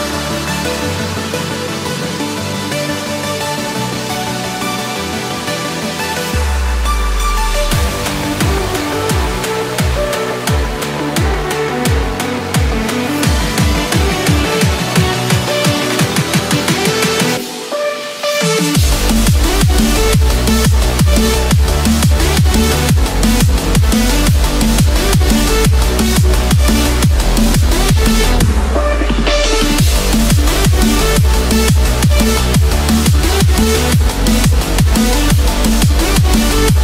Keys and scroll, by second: 7.9 ctrl+-, 8.2 ctrl+0, 16.0 ctrl+-, 21.8 ctrl+-.